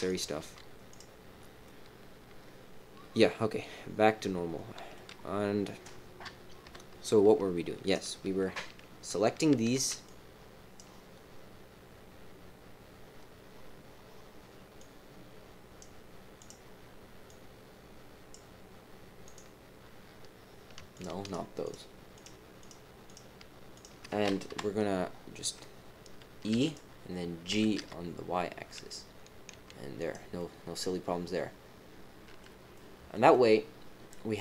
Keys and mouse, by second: 0.0 click, 0.4 g, 1.6 middle click, 6.2 KP_3, 6.6 KP_1, 7.8 click, 9.2 click, 9.7 c, 20.9 shift+click, 21.2 shift+click, 21.6 shift+click, 22.1 shift+click, 22.6 shift+click, 23.0 shift+click, 23.7 shift+click, 24.4 KP_3, 26.5 e, 27.4 g, 30.3 click, 31.3-32.4 middle drag, 32.7 middle click, 33.3-34.3 middle drag.